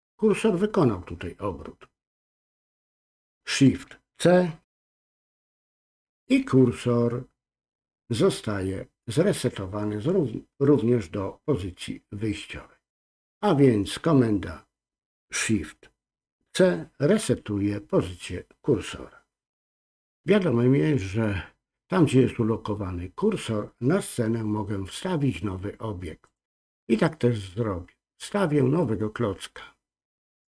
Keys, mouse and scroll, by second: 26.3-30.5 drag.